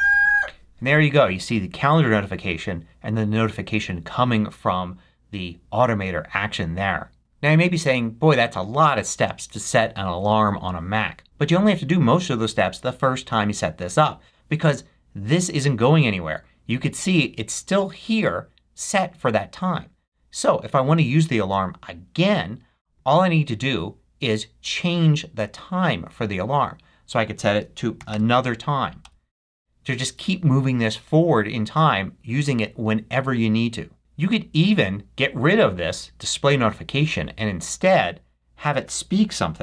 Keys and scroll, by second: 28.2 typing, 29.1 Return.